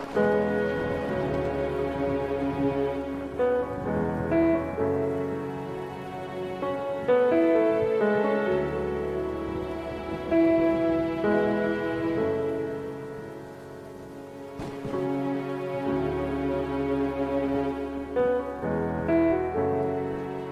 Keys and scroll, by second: 3.7 ctrl+alt+Tab, 4.2 ctrl+alt+Tab, 4.6 ctrl+alt+KP_0, 5.7 b.